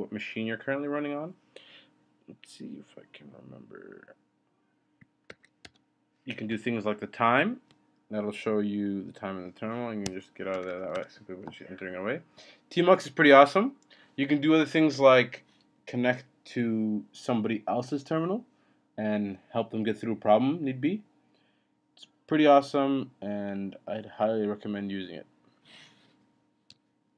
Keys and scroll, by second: 5.3 ctrl+b, 7.3 t, 10.0 Escape, 10.6 Return, 10.9 Return.